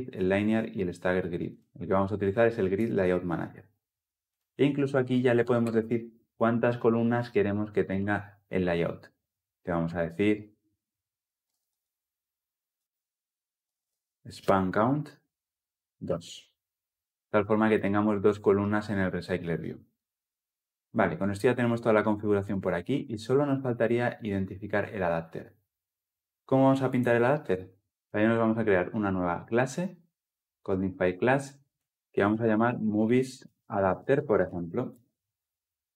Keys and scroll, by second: 14.5 Return, 15.1 Return, 27.9 alt+Insert.